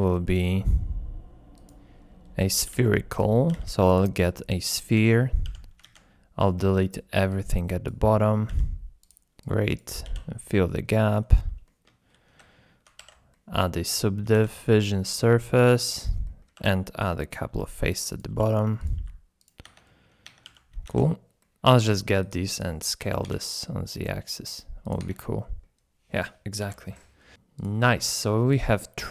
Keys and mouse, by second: 2.6 g, 2.7 x, 3.1 click, 3.5 g, 3.9 click, 4.4-4.8 middle drag, 5.0 Tab, 5.2 click, 5.5 1, 5.8 alt+z, 6.5 click, 7.4 click, 8.5 x, 9.4 click, 10.0 f, 10.4 click, 11.6 shift+click, 12.3 Tab, 13.3-13.6 drag, 14.3 alt+z, 14.7-15.5 ctrl+drag, 15.7 Tab, 16.2 click, 16.5 3, 17.5 i, 18.1 click, 18.3 i, 18.8 click, 19.0 i, 19.4 click, 19.6 Tab, 19.8 click, 20.2 Tab, 20.4 1, 20.8 alt+z, 21.0 super+Tab, 21.3 super+Tab, 21.9 click, 22.5 click, 23.0 a, 23.2 s, 23.3 z, 24.8 click, 25.0 Tab, 25.2-25.6 middle drag, 26.6 KP_7, 27.3 s, 27.6 click, 28.2 click, 28.8-29.1 middle drag.